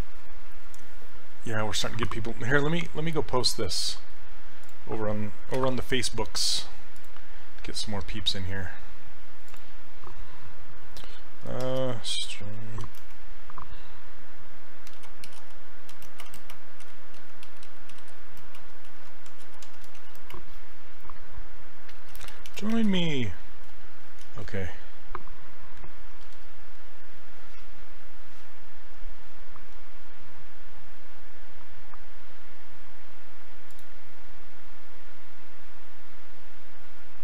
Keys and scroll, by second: 5.6 ctrl+c, 11.4-13.4 typing, 14.8-20.5 typing, 21.7-23.9 typing, 24.3 shift+Return, 26.3 ctrl+v.